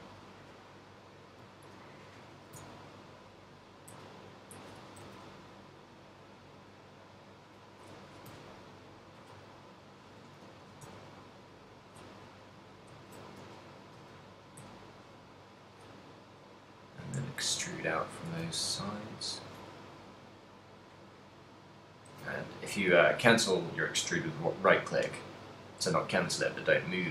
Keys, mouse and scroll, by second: 0.1 middle click, 1.4 right click, 1.8 shift+middle click, 2.5 e, 4.8 click, 5.0 s, 7.8 click, 8.3 e, 10.5 click, 10.8 e, 12.0 click, 13.5 ctrl+z, 13.5 e, 15.9 click, 16.6 right click, 17.3 middle click, 19.3 shift+right click, 19.8 middle click, 21.3 e, 21.8 right click, 22.3 alt+s.